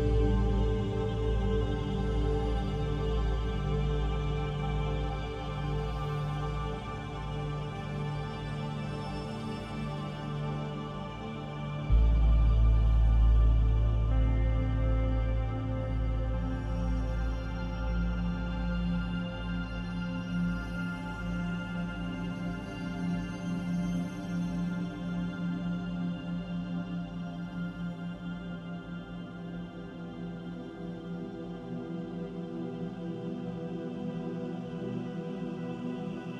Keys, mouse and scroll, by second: 0.1-0.5 scroll down 3, 0.5 middle click, 1.0-2.1 scroll up 3, 2.5 shift+middle click, 3.0 scroll up 2, 3.4 middle click, 5.4 click, 13.4 click, 14.4 middle click, 20.6 click, 21.5 middle click, 22.8 click, 23.6 click, 24.1 Tab, 24.6 middle click, 27.2 middle click, 30.9 click, 32.1 click.